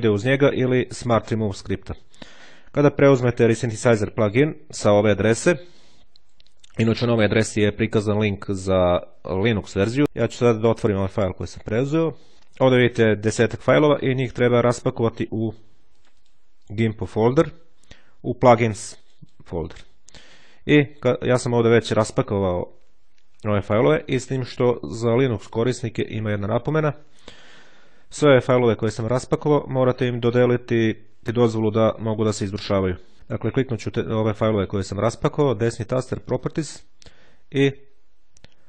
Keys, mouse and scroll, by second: 10.0-11.3 drag, 15.5-16.7 drag, 17.9-19.7 drag, 24.4-25.9 drag, 27.5-28.7 drag, 31.9-33.1 shift+drag, 35.1 right click, 36.1 click, 37.5 click.